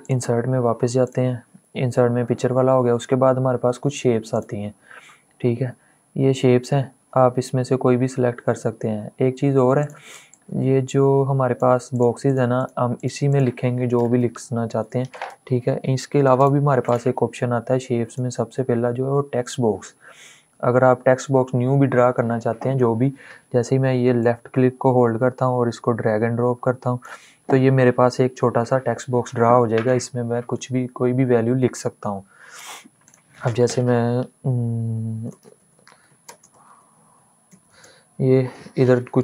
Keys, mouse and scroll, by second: 4.4 click, 5.7-7.6 scroll down 1, 9.5-11.6 drag, 13.6-15.0 typing, 16.1 click, 23.9-29.2 drag, 32.8 click, 34.9-37.7 typing, 38.8 click.